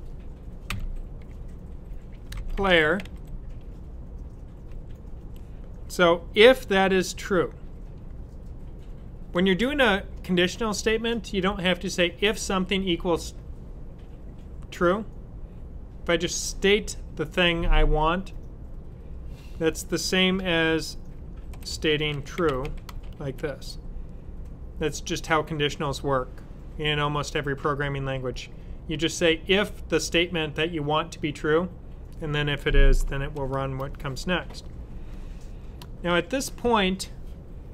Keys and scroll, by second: 0.5 typing, 2.0-3.4 typing, 4.6-5.1 typing, 21.1-23.1 typing, 33.2 shift+[.